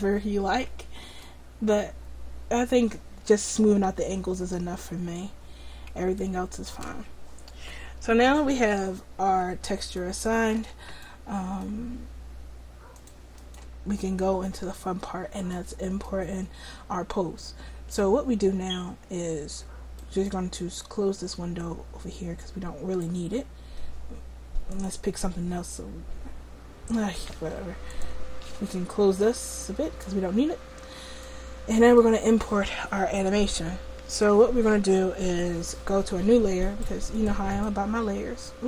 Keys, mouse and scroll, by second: 6.3-7.7 middle drag, 10.1-12.3 middle drag, 12.3 click, 12.8 click, 13.6-14.8 drag, 14.8-17.5 middle drag, 21.0 middle click, 21.3-27.4 drag, 27.9-35.6 drag, 36.7-38.6 drag.